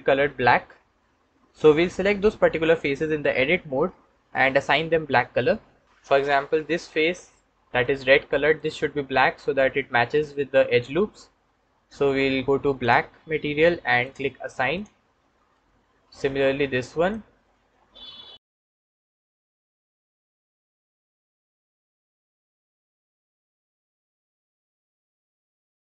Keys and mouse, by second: 5.8 Tab, 6.0 click, 7.0 ctrl+click, 8.4 click, 12.7-16.0 drag, 16.8 click, 18.7 click, 18.9 middle click, 19.0 click, 20.3 click, 20.5 middle click, 21.0 click, 21.1 middle click, 21.4 click, 22.0 middle click, 22.4-23.1 drag, 23.1 middle click, 23.5 middle click, 24.8 middle click, 25.7 ctrl+middle click.